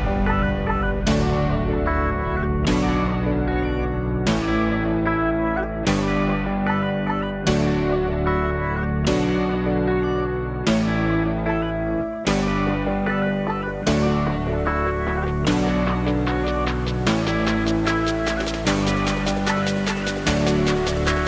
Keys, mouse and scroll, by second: 0.4 s.